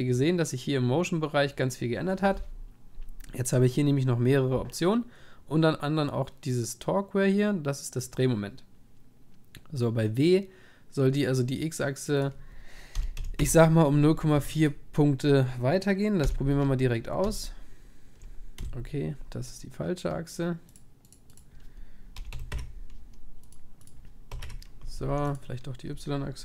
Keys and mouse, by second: 12.2-14.3 drag, 14.4 ctrl+s, 16.2 p, 18.6 p, 21.2-26.1 drag, 25.1 ctrl+s.